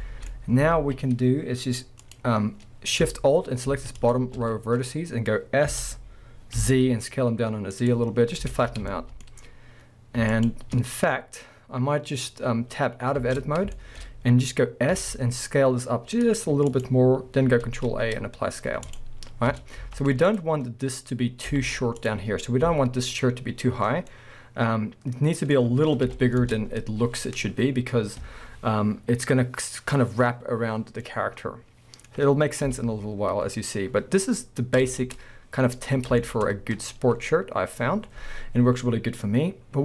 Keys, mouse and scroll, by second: 0.3-2.0 middle drag, 0.4-0.7 scroll up 1, 0.7 alt+a, 2.0-4.1 drag, 4.8-5.6 scroll up 1, 5.6 s, 7.9 click, 8.1 scroll down 1, 8.5 alt+a, 8.9-10.3 shift+middle drag, 10.3 alt+shift+click, 11.2-13.2 scroll down 2, 13.2 Tab, 13.7-14.1 shift+middle drag, 14.1-15.0 scroll up 2, 15.0-16.8 middle drag, 15.0 s, 16.8 click, 17.6 ctrl+a, 19.5 Tab, 19.8 z, 24.0 scroll down 2, 24.1 middle drag, 26.1 KP_1, 26.4 Tab, 31.2 middle click, 31.4-39.8 middle drag, 32.7 KP_1, 34.3-34.8 scroll up 1, 34.8 Tab, 35.9 scroll down 1, 36.5 scroll up 1, 39.7 scroll down 1.